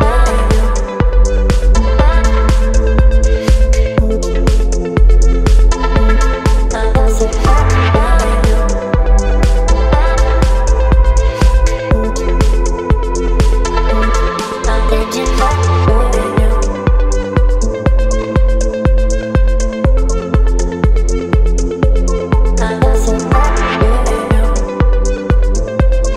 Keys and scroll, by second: 12.8 space, 19.1 ctrl+BackSpace.